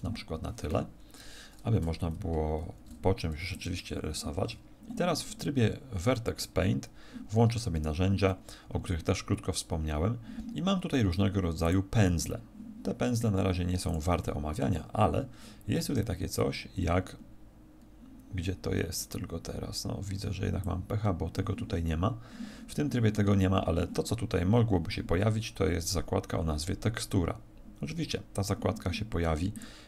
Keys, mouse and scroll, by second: 2.5 alt+shift+s, 3.6 click, 4.5 Tab, 7.7 t, 11.6 click, 17.2-19.3 scroll down 4, 20.5 click, 29.5 click.